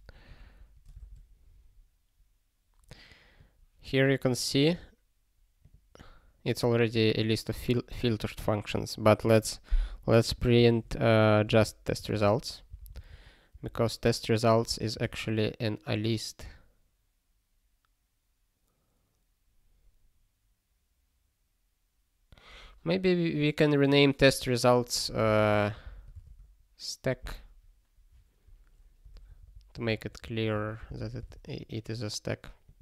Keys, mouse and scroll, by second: 10.2 click, 10.9 ctrl+p, 12.0 alt+d, 12.1 alt+d, 12.7 t, 14.8 Return, 15.0 ctrl+s, 25.1 -, 26.2 ctrl+s, 28.5 click, 29.1 s, 29.7 BackSpace, 30.2 -, 31.2 ctrl+s, 32.6 click.